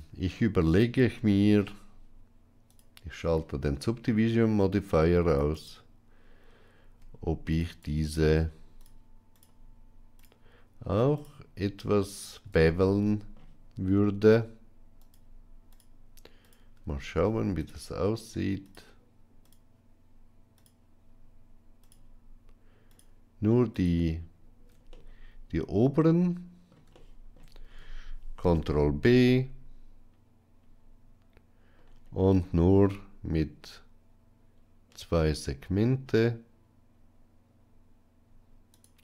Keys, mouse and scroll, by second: 2.5 click, 3.7 middle click, 5.1 alt+click, 5.4 alt+click, 7.4 alt+shift+click, 7.6 alt+shift+click, 8.6 alt+shift+click, 9.2 alt+shift+click, 11.0 alt+shift+click, 11.9 alt+shift+click, 12.5 middle click, 14.9 alt+shift+click, 16.3 alt+shift+click, 17.4 alt+shift+click, 21.7 alt+shift+click, 24.7-26.5 middle drag, 26.9 shift+middle click, 28.3 ctrl+b.